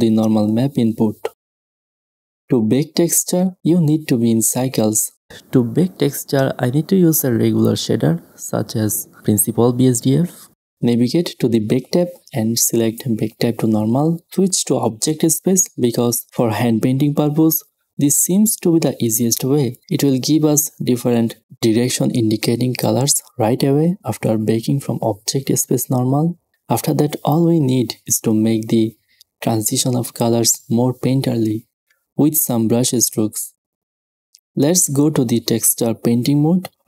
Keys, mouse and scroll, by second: 0.0 shift+space, 7.6 shift+a, 25.7-26.3 middle drag, 26.4 middle click, 26.8-30.8 middle drag.